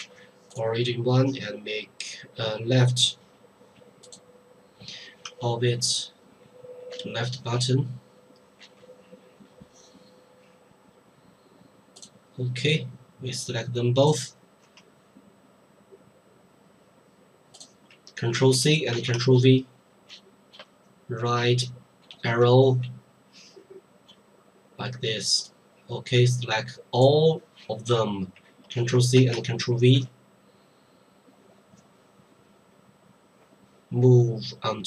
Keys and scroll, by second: 0.0 Delete, 7.0 Left, 18.3 ctrl+c, 18.9 ctrl+v, 20.1 Right, 28.7 ctrl+c, 29.1 ctrl+v, 29.9 ctrl+Right.